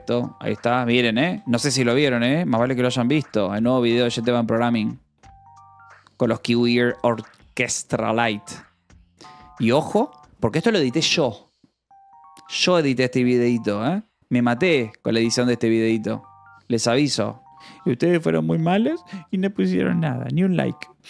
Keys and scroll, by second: 0.2 j, 1.2 k, 1.8 f, 3.2-3.9 typing, 5.5 space, 5.7 j, 7.2 k.